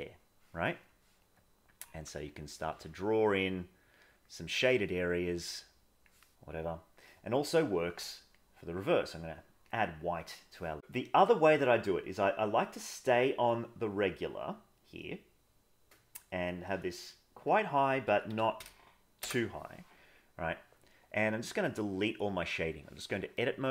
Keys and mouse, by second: 0.9 middle click, 1.9-4.5 drag, 5.5 click, 8.4 click, 11.2-13.3 drag, 14.2-17.1 drag, 17.5-19.2 drag, 21.4 middle click, 22.6 middle click.